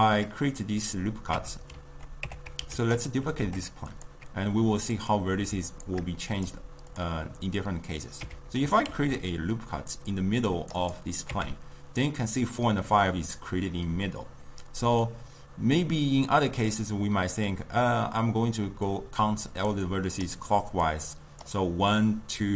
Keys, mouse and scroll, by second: 1.4 Tab, 2.3 Tab, 2.8 shift+d, 3.3 g, 5.2 click, 8.3 Tab, 9.0 ctrl+r, 11.4 Tab, 16.6-22.5 drag.